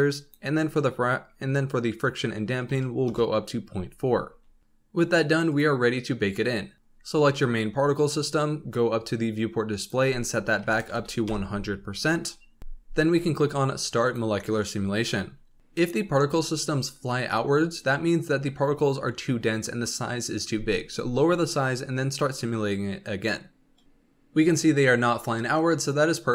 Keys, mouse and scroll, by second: 0.0-3.1 drag, 5.4 click, 7.7-9.1 scroll up 8, 9.1 scroll up 2, 9.7-10.9 drag, 10.9 KP_0, 12.6-14.1 scroll down 5, 14.1-16.1 drag.